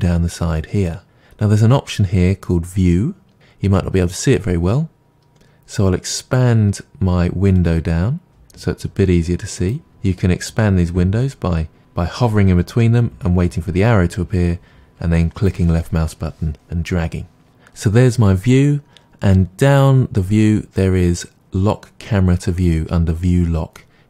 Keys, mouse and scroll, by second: 7.7-11.8 drag, 12.2-24.0 drag.